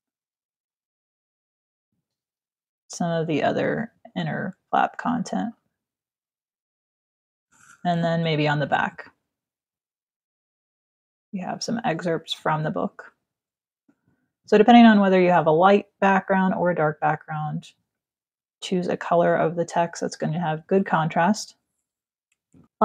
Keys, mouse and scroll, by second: 0.0-2.0 typing, 1.5 ctrl+click, 2.1 click, 3.6 shift+click, 5.8 click, 7.7 t, 8.3 click, 11.0 ctrl+click, 11.7 v, 12.0 click, 18.3 alt+click, 22.3 click.